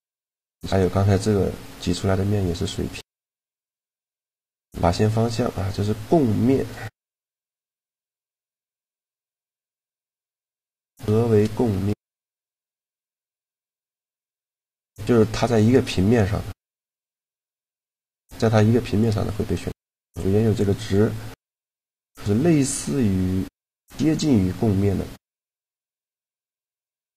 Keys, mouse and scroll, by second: 2.3-3.8 drag, 3.8 a, 4.2 shift+g, 6.6 click, 7.2-9.0 middle drag, 7.5 shift+g, 11.0 click, 11.4 Tab, 11.6-13.8 right drag, 11.8 Tab, 13.0 shift+g, 17.8-20.6 middle drag, 20.6-22.2 drag.